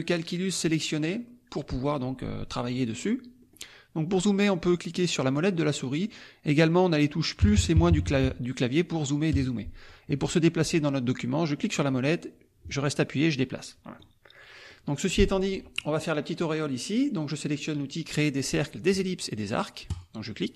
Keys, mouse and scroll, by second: 0.4 click, 1.0 click, 3.4 middle click, 3.4-3.7 scroll up 1, 5.2 middle click, 5.2-5.8 scroll up 2, 5.6 middle click, 7.4 KP_Add, 7.7 KP_Subtract, 9.3 KP_Add, 11.6-14.2 drag, 14.7 click, 19.9 click.